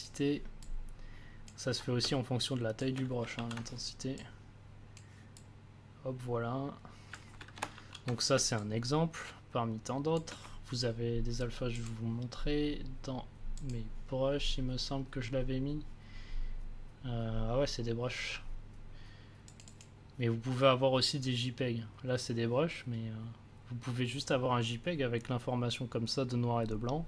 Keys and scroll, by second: 2.0 space, 3.1 c, 3.3 ctrl+z, 7.7 ctrl+z, 8.3 space.